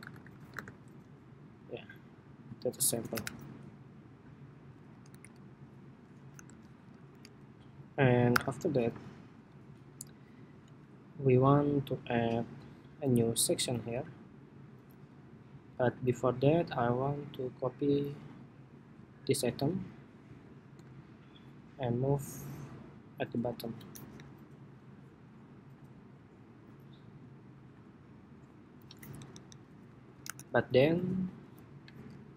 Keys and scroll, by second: 0.7 Escape, 3.2 super+-, 4.8 super+=, 5.5 super+=, 6.1 super+-, 6.8 super+=, 7.7 super+=, 8.0 super+-, 9.2 super+-, 20.0 super+c, 20.5 super+v, 23.9 alt+Up, 25.0 alt+Up, 30.0 super+=.